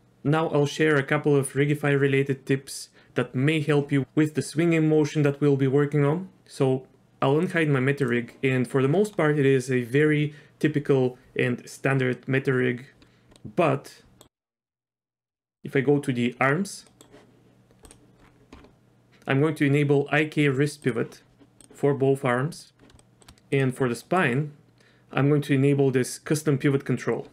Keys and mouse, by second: 7.5 click, 13.4-14.3 middle drag, 14.4 Tab, 15.3 z, 15.6 drag, 16.9 middle click, 17.9 click, 20.8 click, 22.6 click, 23.0 shift+middle drag, 23.5 drag, 24.0 middle click.